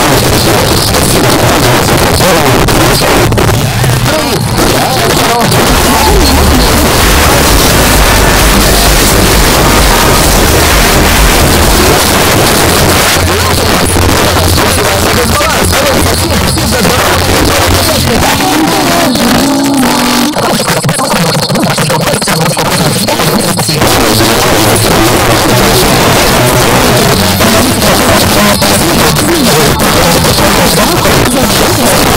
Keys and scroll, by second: 12.0 Page_Down.